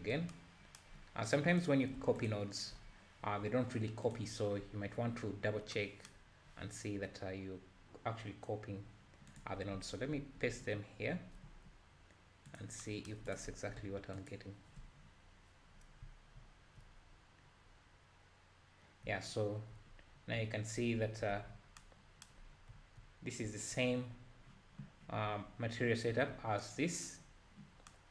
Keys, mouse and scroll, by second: 2.3 ctrl+shift+click, 3.4-4.1 scroll down 1, 4.2 click, 4.6-5.0 scroll up 3, 7.0-7.8 scroll down 3, 8.1-8.8 scroll up 2, 10.2 ctrl+v, 12.3 g, 14.3 ctrl+shift+click, 15.2-15.7 scroll down 1, 16.4 `, 16.4 `, 17.0-17.5 scroll up 1, 17.5-17.9 scroll down 1, 18.1 scroll down 1, 18.2-18.7 scroll up 2, 19.0 `, 19.3 middle click, 19.9-20.3 scroll up 2, 20.3 `, 20.9-21.3 scroll up 3, 21.3 alt+a, 22.7 `, 26.1 `, 27.3-27.8 scroll down 2.